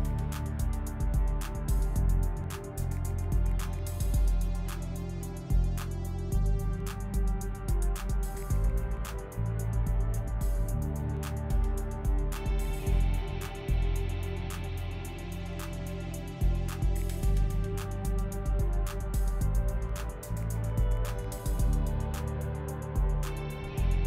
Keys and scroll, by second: 0.0-2.9 typing, 3.2 ctrl+z, 6.0-9.7 typing, 12.5 shift+s, 12.9 shift+s, 15.4 p, 21.2-24.0 typing.